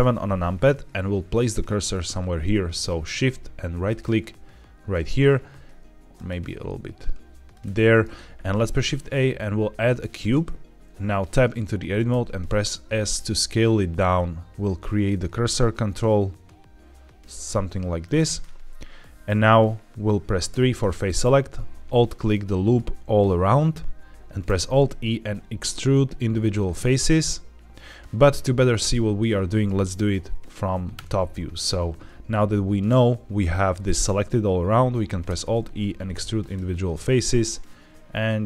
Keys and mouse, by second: 3.8 shift+right click, 6.0 shift+right click, 7.4 shift+right click, 8.4 shift+a, 11.1 Tab, 12.0 s, 17.9 click, 18.3 middle click, 20.5 3, 20.8 middle click, 24.3 alt+e, 30.8 KP_7, 35.1 alt+e.